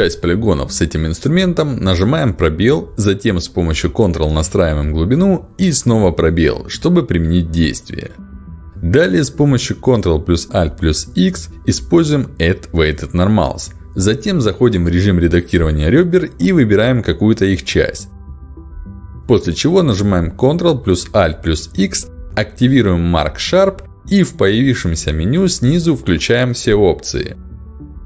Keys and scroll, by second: 0.0 space, 4.4 space, 7.8 ctrl+alt+x, 20.6 ctrl+alt+x.